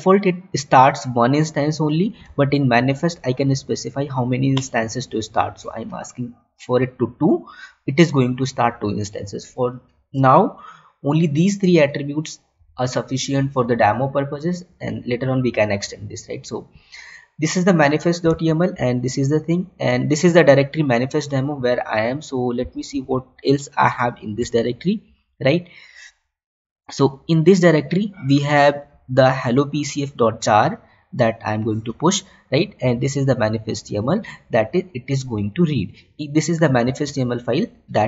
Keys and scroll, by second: 0.2 Tab, 2.9 Tab, 18.9 Tab, 37.2 alt+Tab.